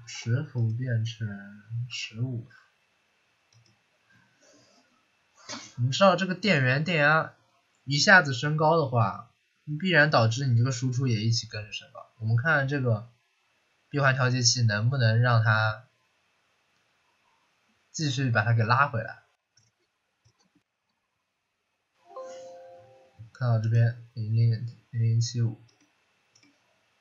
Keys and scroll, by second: 0.0-0.4 typing, 1.8-2.3 typing.